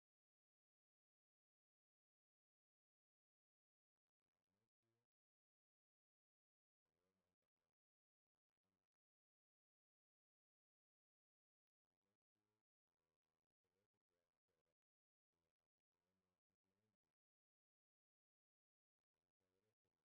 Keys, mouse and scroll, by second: 1.1 click, 2.7-4.0 drag, 4.2 BackSpace, 4.5 Return, 5.6-6.9 drag, 7.7 click, 9.7 0, 9.8 0, 11.6 0, 12.5 Return, 14.4 click, 15.8-20.1 drag.